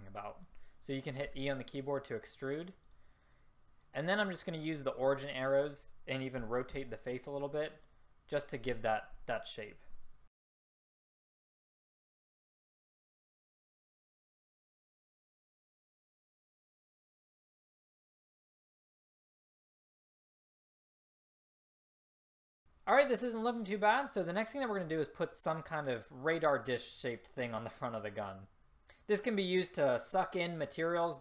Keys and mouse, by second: 1.5 e, 3.9-4.9 drag, 6.5 r, 10.3 s, 10.6 click, 10.8 e, 11.2 r, 11.4 middle click, 11.9 s, 12.9 middle click, 13.1 e, 13.5 r, 13.7 click, 14.2 r, 14.7 click, 14.9 r, 16.1 click, 16.2 s, 16.3 click, 16.7 click, 17.3 click, 17.8 click, 17.8 s, 18.7 a, 19.2 click, 19.6 middle click, 20.2-22.4 typing, 21.7 click.